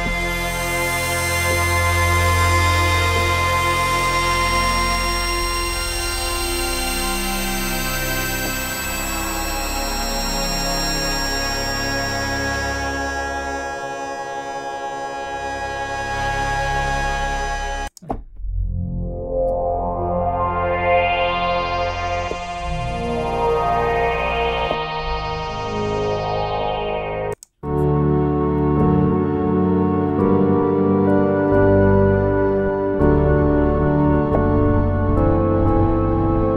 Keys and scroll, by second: 0.0 F4, 3.1 F4, 8.3 F3, 18.0 F1, 18.1 F2, 19.4 F3, 19.4 F4.